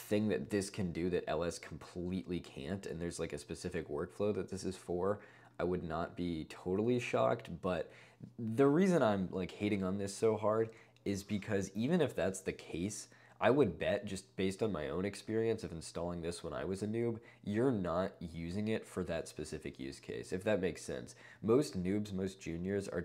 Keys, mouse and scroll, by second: 5.2 click, 5.4 click, 5.5 click.